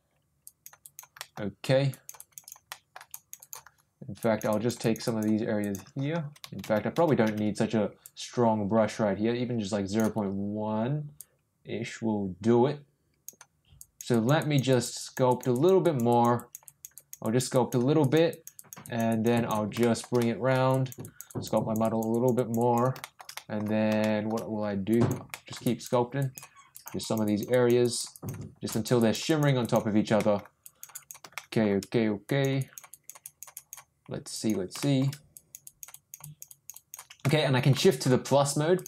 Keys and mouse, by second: 0.4 click, 0.8 click, 1.2 middle click, 1.9 click, 2.2 click, 2.4 click, 2.7 middle click, 3.1 click, 3.4 click, 4.2 click, 4.5 click, 4.8 click, 5.0 click, 5.6 click, 8.0-10.1 ctrl+drag, 11.2-13.3 drag, 13.7 click, 14.1 click, 14.4 click, 14.7 click, 15.0 click, 15.3 click, 15.5 click, 15.8 click, 16.1 click, 16.3 click, 16.6 click, 16.9 click, 17.2 click, 17.5 click, 18.0 click, 18.3 click, 18.5 click, 18.8 click, 19.1 click, 19.3 click, 19.8 shift+middle click, 20.2 middle click, 20.7 click, 21.0 click, 21.3 click, 21.5 click, 21.8 click, 22.1 click, 22.3 click, 22.6 click, 23.0 shift+middle click, 23.3 middle click, 24.0 shift+middle click, 24.9 click, 25.3 middle click, 25.6 click, 26.2 click, 26.7 click, 27.0 click, 27.2 click, 27.5 click, 27.8 click, 28.1 click, 28.7 click, 29.0 click, 29.2 click, 29.6 click, 30.1 middle click, 30.6 click, 30.9 click, 31.3 shift+middle click, 32.2 click, 32.6 click, 32.9 click, 33.2 click, 33.5 click, 34.3 click, 34.8 shift+middle click, 35.3 click, 35.6 click, 35.9 click, 36.2 click, 36.5 click, 36.7 click, 37.2 middle click, 38.7 click.